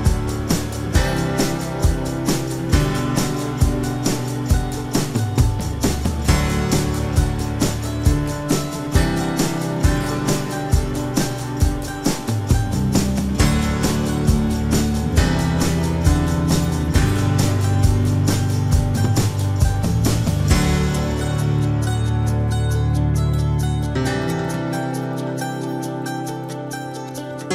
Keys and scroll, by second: 11.6 Return.